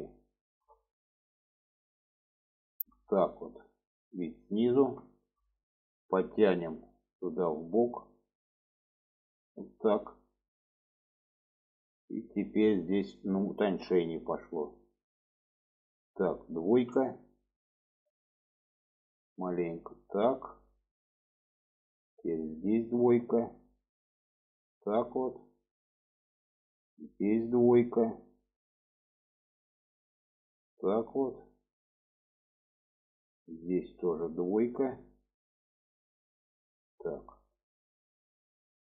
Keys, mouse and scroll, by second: 0.5 shift+click, 0.9 middle click, 1.9 shift+middle click, 2.8 shift+click, 3.4-5.0 middle drag, 5.2 shift+middle click, 6.6 click, 7.8 click, 10.7-11.2 shift+middle drag, 12.2 shift+middle click, 13.1 shift+middle drag, 14.2-14.7 middle drag, 15.4 middle click, 16.8 2, 17.4 click, 17.8 alt+middle click, 19.5-20.5 drag, 20.8 shift+middle click, 21.3 middle click, 22.5 click, 22.9 middle click, 24.4-26.0 drag, 26.3 middle click, 27.5 click, 27.9-29.3 middle drag, 30.0-32.1 drag, 32.4 middle click, 33.7 click, 34.0-35.0 middle drag, 35.4-36.9 middle drag, 37.4 alt+middle click, 38.6 alt+middle click.